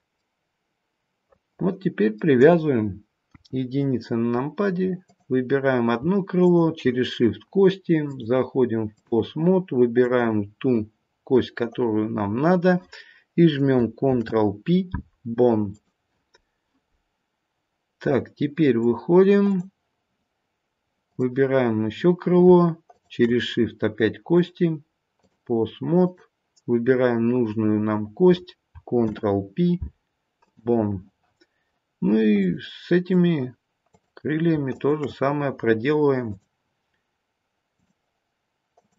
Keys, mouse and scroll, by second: 0.1 middle click, 3.2 KP_1, 4.1-5.0 scroll down 1, 5.0 click, 6.3 shift+click, 7.9 click, 10.0 click, 13.9 ctrl+p, 18.7 click, 21.1 click, 22.8 shift+click, 24.3 click, 28.9 ctrl+p, 32.3 click, 33.8 click, 34.7 shift+click, 35.0 shift+click, 36.2 click, 38.7 click.